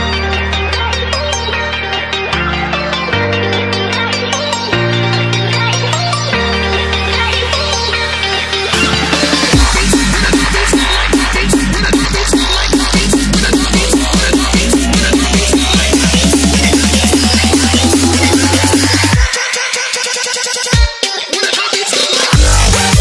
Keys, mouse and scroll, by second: 4.8 alt+Tab, 5.4 click, 6.1 c, 6.3 alt+Tab, 6.8 v, 7.2 click, 7.3 Return, 7.9 ctrl+z, 8.3 click, 8.4 Return, 9.0 Return, 9.6 click, 11.4 t, 11.6 click, 12.3 Return, 15.1 click, 18.9 ctrl+s, 20.1 click.